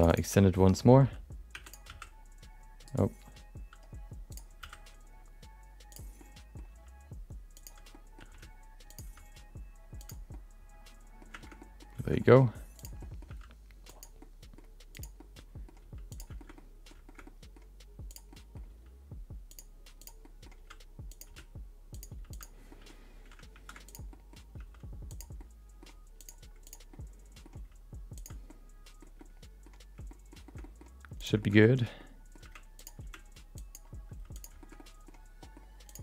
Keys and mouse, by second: 0.5 middle click, 0.7 middle click, 1.5 e, 1.8 s, 4.3 click, 4.6 s, 6.3 middle click, 6.7 g, 8.0 middle click, 8.8 r, 9.0 g, 10.4 middle click, 11.4 shift+middle click, 11.6 middle click, 12.2 middle click, 12.7 click, 13.0 middle click, 13.3 g, 14.3 middle click, 14.9 click, 15.1 middle click, 15.8 g, 16.4 middle click, 16.7 middle click, 17.3 middle click, 18.1 click, 18.3 middle click, 18.7 g, 20.0 click, 20.2 middle click, 20.5 g, 21.2 r, 22.1 g, 22.8 middle click, 23.2 1, 23.5 shift+2, 23.8 click, 24.1 middle click, 24.5 g, 25.5 middle click, 26.2 click, 26.6 click, 26.9 middle click, 27.5 g, 28.6 middle click, 29.3 middle click, 30.2 middle click, 30.5 middle click, 31.2 click, 31.4 shift+middle click, 31.5 middle click, 31.9 middle click, 32.4 g, 33.0 r, 34.1 g, 34.8 middle click, 35.4 middle click, 35.8 click.